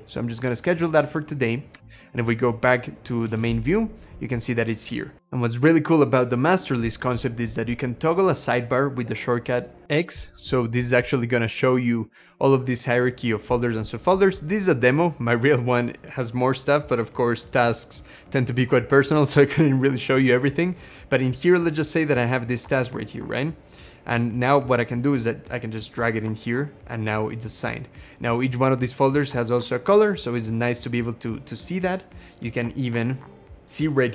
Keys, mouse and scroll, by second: 1.6 Escape, 1.7 Caps_Lock, 9.8 x.